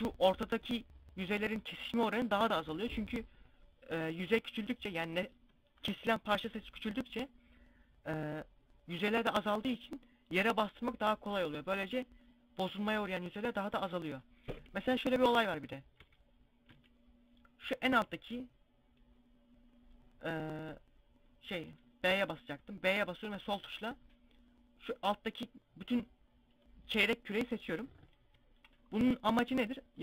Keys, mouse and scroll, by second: 13.1 scroll down 1, 14.0 KP_1, 14.7 KP_5, 15.6 z, 16.1 a, 21.1 b, 28.2 middle click, 29.8 KP_5.